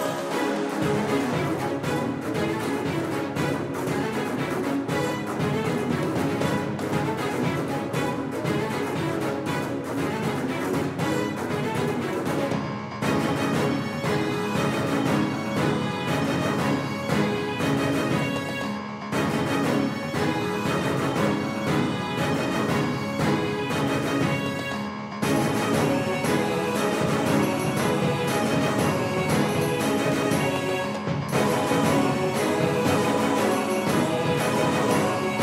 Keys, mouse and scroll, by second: 7.9-10.2 drag, 18.8-21.2 drag, 20.9 z, 24.7 Tab, 29.7 Tab, 32.2 c, 35.2 a.